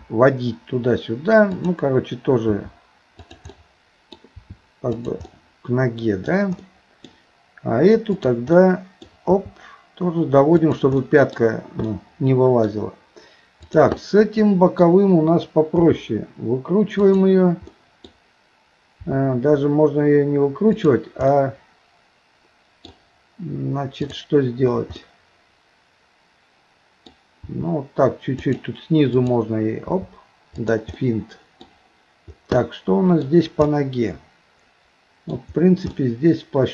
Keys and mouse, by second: 2.5 r, 3.5 middle click, 4.4 r, 5.3-6.3 middle drag, 6.6 middle click, 8.6 middle click, 9.3 r, 11.0 middle click, 11.9 middle click, 13.6 click, 14.0 middle click, 15.8 r, 17.7 middle click, 19.0 r, 21.3-22.9 middle drag, 24.0 click, 25.0-27.1 middle drag, 27.5 r, 29.2 click, 29.9 r, 31.0 middle click, 32.6 middle click, 33.7-35.3 middle drag, 35.9-36.7 middle drag.